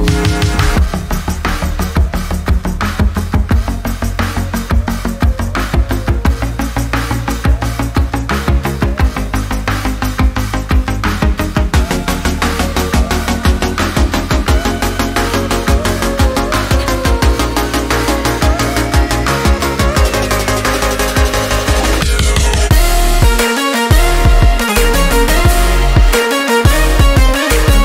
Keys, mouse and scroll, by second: 1.3 click, 1.3 typing, 3.6 scroll down 1, 10.3 scroll down 1, 12.6 click, 20.3 click, 20.3 typing, 22.6 click, 26.6-27.8 drag.